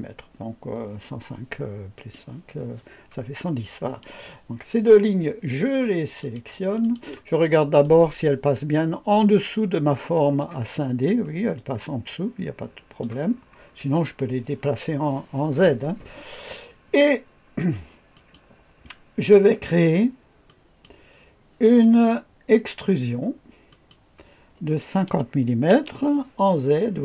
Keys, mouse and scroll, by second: 1.9 click, 6.2 click, 6.8 ctrl+click, 7.8-10.4 drag, 10.8-11.6 scroll up 2, 11.6-13.0 drag, 13.2-18.1 scroll down 2, 18.1 click, 20.5 click, 23.7 click, 25.5 KP_5, 25.7 KP_0.